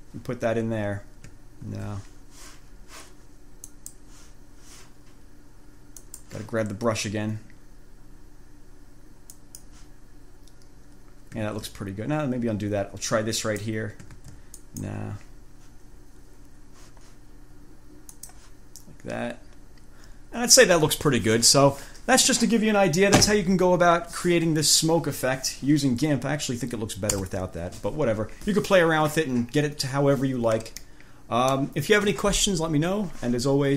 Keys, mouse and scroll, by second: 1.9 ctrl+z, 3.9 click, 6.2 click, 9.5 click, 11.7 ctrl+z, 13.5 click, 14.4 ctrl+z, 14.8 ctrl+click, 18.3 click, 27.4 ctrl+z, 31.0 click.